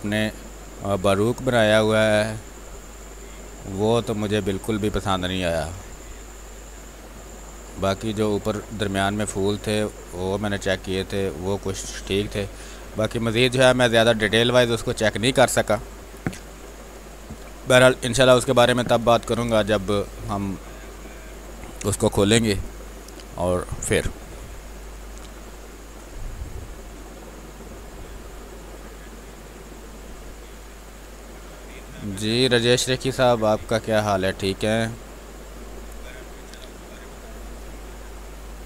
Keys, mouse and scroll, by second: 5.7 space, 5.9 click, 6.3 space, 7.3 click, 7.4-11.0 drag, 11.0 space, 11.2 alt+click, 13.3 space, 13.7 click, 13.7 click, 13.9 space, 15.0 click, 15.0 click, 16.5 w, 17.2 click, 17.6 space, 17.9 alt+click, 21.5 space, 21.8 click, 22.0 space, 22.3 r, 22.5 click, 24.5 space, 26.5-27.8 drag, 27.8 ctrl+z, 29.8-37.8 drag, 37.8 r.